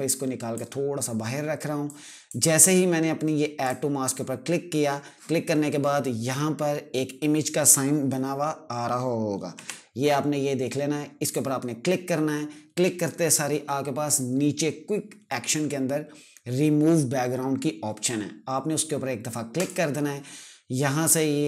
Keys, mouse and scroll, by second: 9.2 `, 10.9 click, 19.2 click.